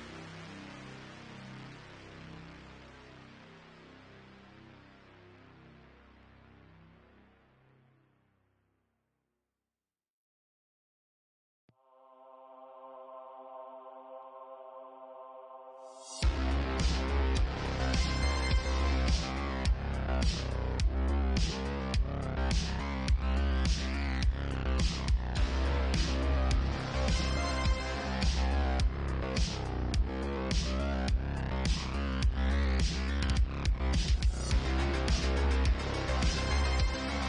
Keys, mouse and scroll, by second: 0.9-4.5 drag, 1.7 g, 4.5-6.1 middle drag, 5.2 Tab, 6.1 click, 6.2-10.7 middle drag, 7.7 i, 14.1 x, 16.0-17.6 drag, 17.2 w, 18.4 i, 21.4 x, 25.0 Tab, 25.9 ctrl+1, 26.0-27.0 ctrl+middle drag, 26.3 ctrl+2, 26.6 ctrl+w, 27.0-28.6 middle drag, 28.2 ctrl+w, 28.6 click, 28.7-31.1 middle drag, 31.2-32.9 middle drag, 33.5 middle click, 33.6 Tab, 34.3 alt+click, 34.4-37.2 alt+middle drag, 36.6 s.